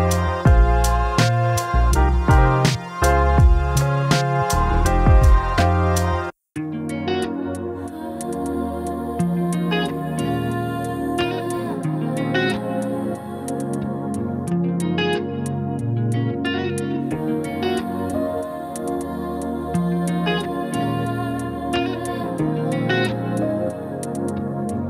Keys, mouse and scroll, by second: 1.5-4.6 drag, 5.0-7.6 drag, 11.0-13.4 drag, 13.9-15.2 typing, 15.8 Tab, 16.5 typing, 16.8 Return, 18.3 typing, 18.5 click.